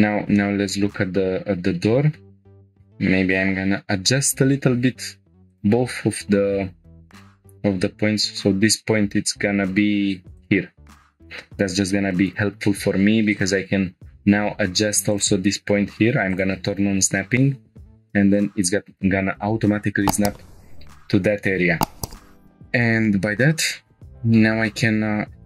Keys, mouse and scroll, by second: 0.0 scroll up 2, 0.4-1.0 shift+middle drag, 1.2-1.5 scroll up 3, 1.8-2.2 shift+middle drag, 2.5 scroll up 2, 2.7-3.1 scroll down 2, 3.4 scroll up 1, 5.0 Tab, 5.5-6.7 drag, 6.7 Tab, 7.1 1, 7.1 g, 10.4 click, 11.5 Tab, 12.3 click, 12.5 Tab, 15.1 click, 16.3 click, 17.3 g, 18.3-20.5 drag, 22.7-25.2 drag, 25.2-25.4 scroll down 6.